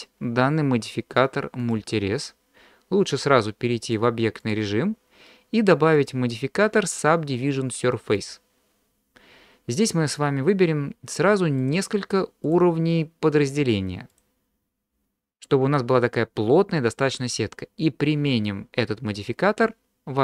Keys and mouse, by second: 1.6 click, 3.8-4.5 drag, 6.0-8.3 drag, 11.6 click, 12.5 click, 14.1 click.